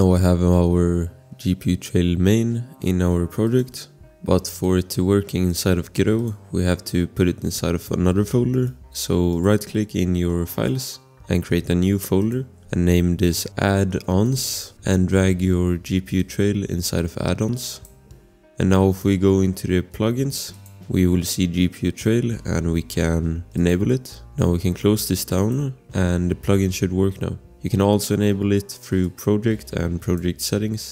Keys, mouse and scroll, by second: 3.4 click, 8.5 right click, 12.2 click, 12.6-14.9 typing, 16.2 click, 20.5 click, 23.5 click, 29.0 click.